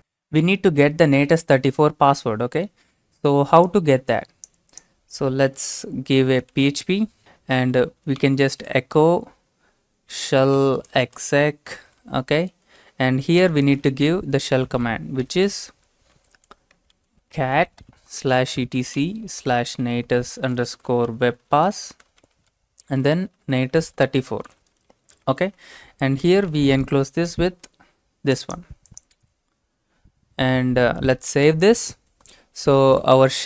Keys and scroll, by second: 6.4-11.8 typing, 13.4-27.0 typing, 28.2-29.0 typing, 31.3 ctrl+s.